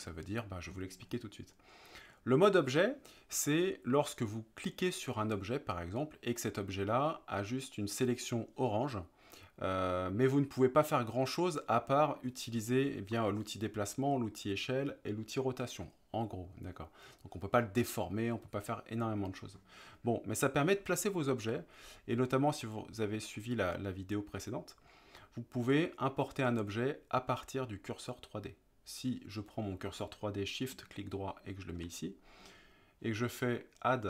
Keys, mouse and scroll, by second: 6.0 click, 22.7-23.4 middle drag, 25.2-25.7 middle drag, 31.0 shift+right click.